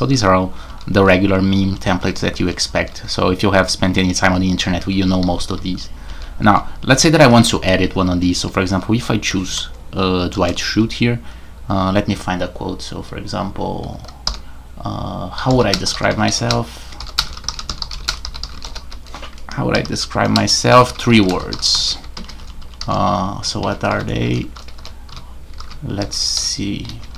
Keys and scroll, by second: 0.0-0.9 typing, 2.1-2.9 typing, 3.9-8.7 typing, 10.3 typing, 14.2-27.1 typing, 23.6 Escape.